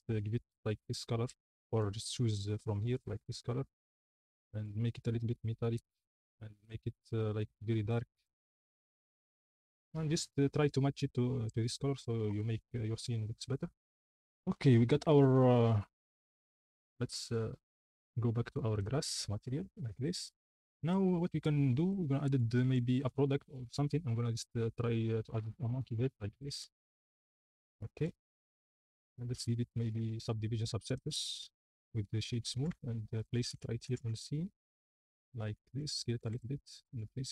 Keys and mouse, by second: 0.0 click, 2.9 click, 4.8 click, 5.8 click, 16.2 click, 20.4 click, 22.6 shift+a, 26.9-28.8 typing, 30.0 ctrl+2, 31.1 right click, 31.8 right click, 32.6-34.0 typing, 35.6 s, 36.2 r, 36.3 x, 36.9 s.